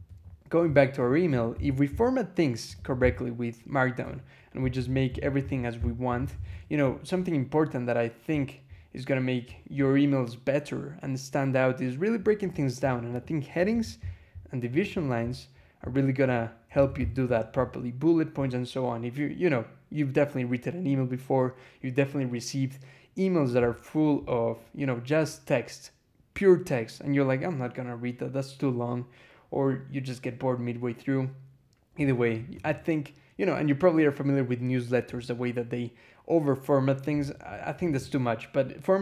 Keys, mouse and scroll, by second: 0.9 click, 1.1 Escape, 1.4 k, 2.4-6.1 typing, 3.9 Escape, 6.4 Escape, 7.1 scroll down 2, 8.2 scroll up 2, 12.1 scroll down 2, 13.0 click, 13.5 shift+v, 13.9-14.2 shift+scroll up 2, 14.6 click, 15.1 scroll down 2, 16.1 scroll up 2, 16.6 j, 16.8 shift+v, 17.1 shift+Escape, 23.5 scroll up 2, 24.0-24.4 scroll up 2, 31.9 scroll down 2, 32.4 click, 35.1 scroll up 2, 37.1 scroll up 2, 37.7 click.